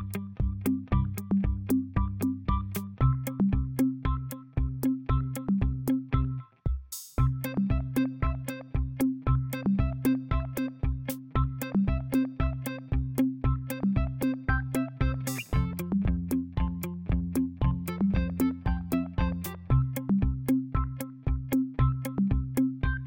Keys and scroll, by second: 0.0-0.2 typing, 1.2 ctrl+a, 5.9 KP_6, 6.2 KP_3, 6.4 KP_5, 10.5 ctrl+a, 15.6 ctrl+z, 16.1 ctrl+z.